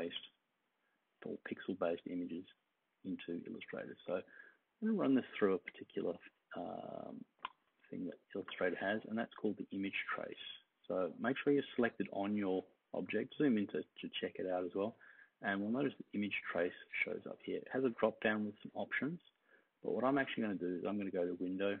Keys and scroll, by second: 6.6-7.4 space.